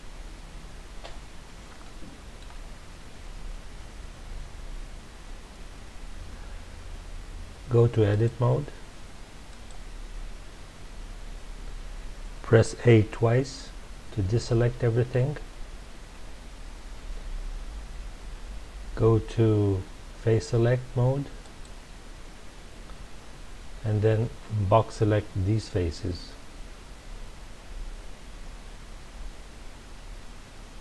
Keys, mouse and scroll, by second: 1.8-4.8 shift+middle drag, 8.1-11.1 drag, 15.2 a, 21.4 click, 25.9 click.